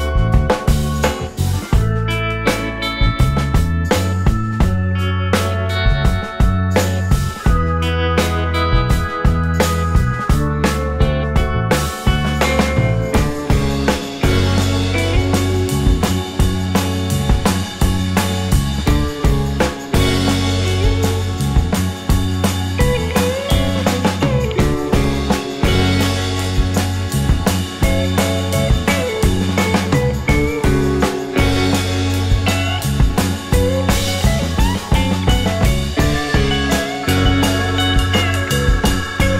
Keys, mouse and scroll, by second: 4.0 alt+click, 4.9 alt+scroll up 2, 6.0 middle click, 8.4 scroll down 1, 9.2 alt+middle click, 9.6-10.2 alt+scroll down 3, 10.2 alt+click, 11.6 alt+middle click, 12.0 alt+click, 12.5 scroll up 1, 13.5 shift+click, 14.8 alt+middle click, 15.0-15.3 alt+scroll up 3, 15.6 middle click, 18.0 alt+click, 18.4 alt+middle click, 20.3-20.6 scroll down 1, 20.6 scroll up 1, 20.7 scroll down 1, 20.9 alt+click, 24.2 scroll up 1, 24.4 alt+click, 25.7 scroll down 1, 25.8 alt+middle click, 26.1 alt+click, 26.6-27.0 alt+scroll up 2, 27.4 alt+click, 29.5 shift+click, 33.0 ctrl+g, 33.7 double click, 34.5-39.3 typing.